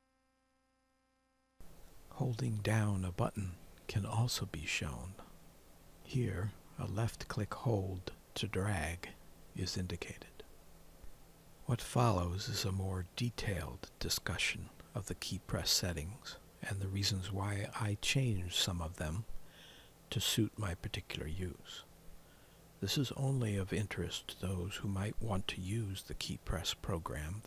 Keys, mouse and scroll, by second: 1.1 alt+F4, 3.9 alt+F4, 3.9 Return, 3.9 click, 14.4 click, 16.0 click.